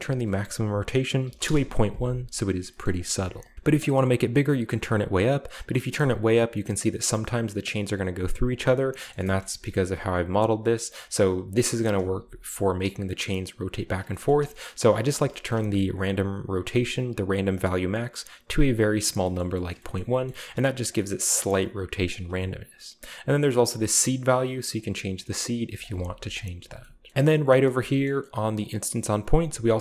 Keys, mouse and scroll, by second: 0.0 click, 1.3 typing, 1.4 Return, 2.8 middle click, 2.9 click, 3.1 x, 3.8-8.7 drag, 8.4 right click, 8.7-9.4 middle drag, 9.0-9.8 scroll up 3, 9.8 a, 10.2-11.0 right drag, 11.6-11.9 middle drag, 12.1 g, 12.4-12.8 middle drag, 12.8-13.9 right drag, 13.9-14.9 scroll down 1, 14.1-15.0 shift+middle drag, 15.0-15.5 shift+right drag, 15.3 shift+middle click, 15.5-16.6 scroll up 1, 16.0 click, 17.5-19.2 drag, 18.7-19.2 right drag, 19.2 scroll up 2, 19.3-19.7 scroll down 3, 19.7-21.1 scroll up 4, 20.5 shift+middle drag, 20.8-22.8 shift+middle drag, 24.8 middle click, 25.7-26.8 drag, 26.5 typing, 26.6-27.8 scroll down 1, 27.2 right click, 27.8-29.7 scroll up 1, 28.0-29.6 middle drag, 28.5 click.